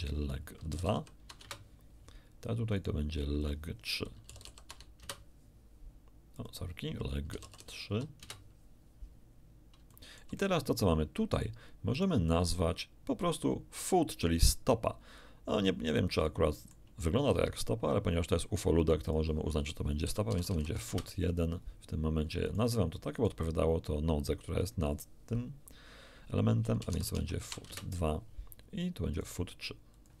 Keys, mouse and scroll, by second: 0.7 l, 0.7 e, 0.9 g, 1.4 Return, 1.4 2, 2.7 right click, 3.4 click, 4.3 l, 4.5 e, 4.5 g, 4.7 2, 5.0 Return, 6.3 click, 7.3 l, 7.6 e, 7.6 g, 7.9 3, 8.2 Return, 9.6 scroll down 3, 9.9-11.6 shift+drag, 11.9 middle click, 16.3 shift+click, 19.1 click, 20.1-20.7 typing, 20.9 Return, 22.5 click, 23.1 click, 24.6 click, 26.8-27.5 typing, 27.7 Return, 29.1 right click, 29.9 click.